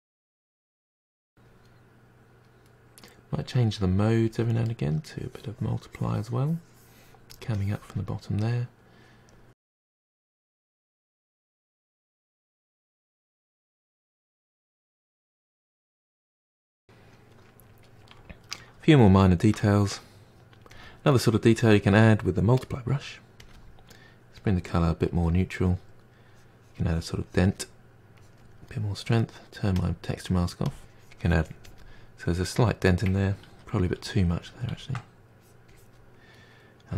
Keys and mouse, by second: 0.3-1.4 drag, 1.5 middle click, 1.7 click, 1.9 middle click, 1.9-2.6 drag, 3.0 click, 3.4 middle click, 3.5 drag, 3.8 middle drag, 3.9 drag, 4.1 middle click, 4.3-4.8 drag, 4.8 middle drag, 4.9-5.4 drag, 5.4 middle click, 5.5 click, 6.1 middle click, 6.2 click, 6.5 middle click, 6.7-7.1 drag, 7.1 middle click, 7.1 click, 7.2-7.5 shift+middle drag, 7.5-8.2 drag, 8.2 middle click, 8.3 drag, 8.5 middle click, 8.5 click, 8.9 middle drag, 9.0 click, 9.2 middle click, 9.3 click, 9.3 middle click, 9.4 click, 9.5 middle drag, 9.5 click, 9.8 middle click, 9.9 click, 10.3 middle click, 10.4-10.9 drag, 10.9 middle click, 11.1 drag, 11.3 middle click, 11.3 click, 11.4-12.0 ctrl+middle drag, 12.6-13.1 drag, 13.1 middle click, 13.3 click, 13.8 middle drag, 13.9 click, 13.9 middle click, 14.0 click, 14.1 middle drag, 14.2 click, 14.3 middle drag, 14.4 drag, 14.5 middle click, 14.5 drag, 14.7 middle click, 14.8 drag, 14.9 middle click, 15.0 click, 15.2 middle drag, 15.3-15.6 drag, 15.6 middle click, 15.6 drag, 15.8 middle click, 15.9 click, 16.1 middle drag, 16.1 click, 16.3-19.1 ctrl+middle drag, 19.1-20.4 drag, 20.4 f, 21.3 click, 22.3-24.1 drag, 24.1 middle click, 24.5-25.6 drag, 26.1 click, 27.6-31.1 drag, 31.1-31.9 ctrl+z, 32.2-34.9 drag, 34.9 f, 35.9-36.9 drag.